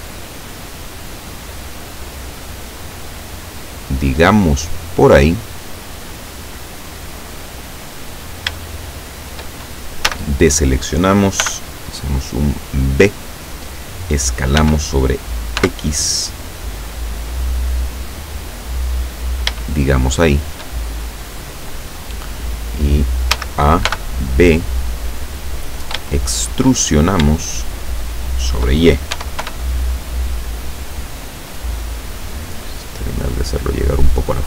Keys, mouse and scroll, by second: 1.9 click, 2.6-4.5 drag, 5.0-7.8 drag, 8.1-8.5 scroll up 1, 8.7 shift+middle click, 10.1 a, 11.5 b, 12.3-13.4 drag, 14.7 s, 15.7 x, 19.2 click, 19.7-20.8 shift+middle drag, 23.4 a, 23.9 b, 24.5 click, 26.2 shift+middle click, 26.3 shift+scroll up 2, 26.9 shift+scroll down 2, 27.2 scroll up 2, 27.4-28.9 shift+middle drag, 29.2 e, 29.5 y, 31.6 click, 32.3-34.4 drag.